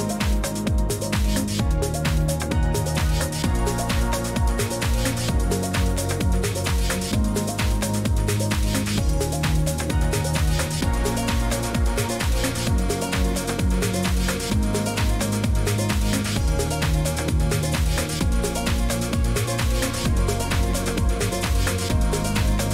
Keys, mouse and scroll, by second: 0.3 click, 1.7 click, 2.0 Escape, 5.0 click, 6.8 click, 9.3 click, 9.7 Escape, 12.2 click, 12.9 click, 15.6 click, 17.0 click, 18.1 click, 18.7 click, 20.5 click, 21.6 click.